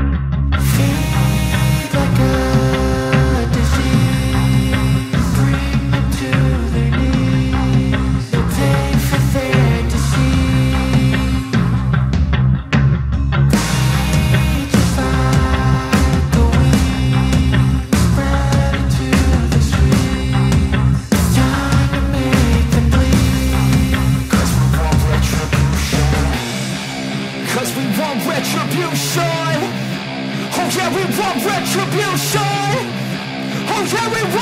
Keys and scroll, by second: 6.1 ctrl+-, 9.6 ctrl+-, 9.8 ], 10.2 ], 10.5 ], 12.6 space, 13.1 ], 23.9 ctrl+alt+z, 25.2 ctrl+alt+z, 26.5 ctrl+alt+z, 26.9 ctrl+alt+z, 29.7 ctrl+alt+z, 33.6 ctrl+-.